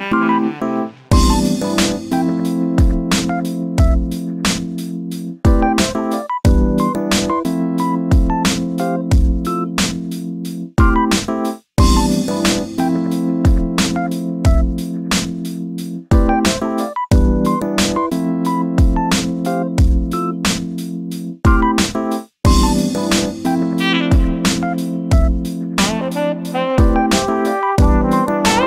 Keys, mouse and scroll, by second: 0.5-2.1 middle drag, 10.3-28.6 drag.